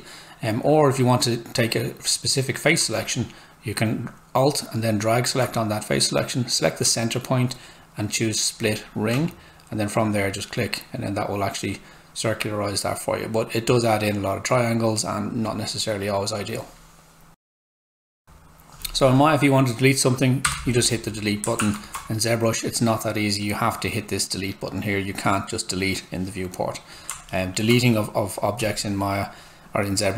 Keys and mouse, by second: 2.8 alt+click, 6.8 space, 8.5 click, 10.0 space, 10.1 click, 17.3 click, 17.8 F8, 20.4 Delete, 21.9 Tab, 27.1 alt+Tab, 27.3 alt+middle click, 28.6 click.